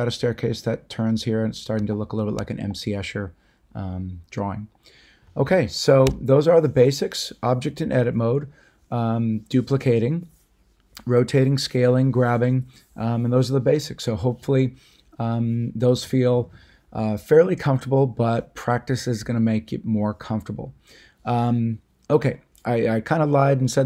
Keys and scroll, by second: 6.0 a.